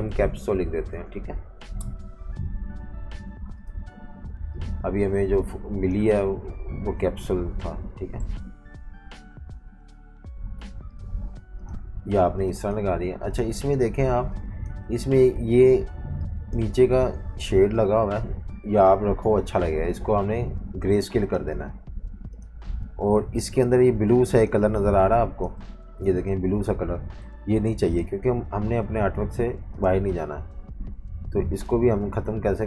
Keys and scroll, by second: 0.0-2.0 typing, 7.0 Left, 7.5 Left, 7.6 Left, 7.7 Left, 13.5 super+z, 13.9-15.4 typing, 17.0 super+z, 17.4 super+3, 18.6 alt+super+3, 24.1 super+z, 24.6-27.2 typing.